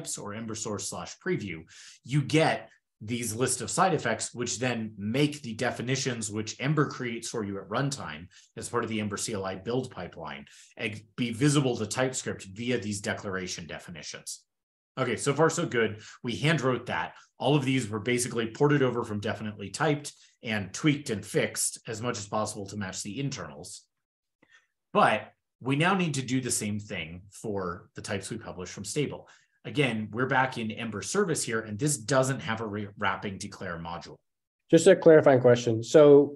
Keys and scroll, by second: 23.8 super+w, 25.7 super+w, 30.4 super+Up.